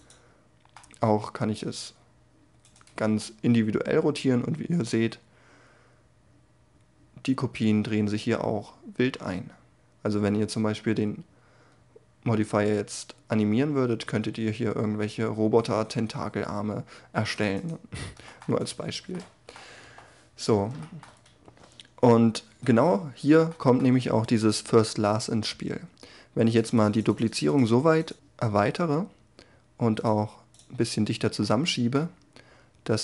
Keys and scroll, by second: 0.5 r, 19.4 7.